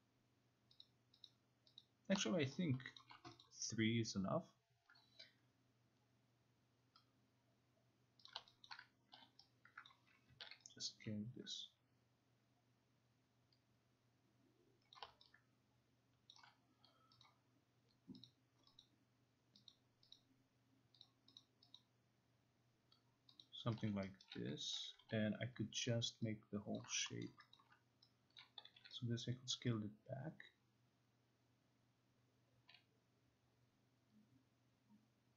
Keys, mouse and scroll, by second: 0.8 click, 1.3 click, 1.9 click, 3.0 alt+click, 3.3 alt+click, 3.4 click, 8.3 click, 8.7 alt+click, 9.2 0, 9.9 click, 10.5 t, 14.9 click, 16.3 alt+click, 17.3 click, 18.3 click, 18.9 click, 19.7 click, 20.1 click, 21.1 click, 21.4 click, 21.8 click, 23.4 click, 24.2 alt+middle click, 25.0 0, 26.8 click, 27.3 alt+middle click, 27.5 alt+click, 28.4 click, 28.8 t.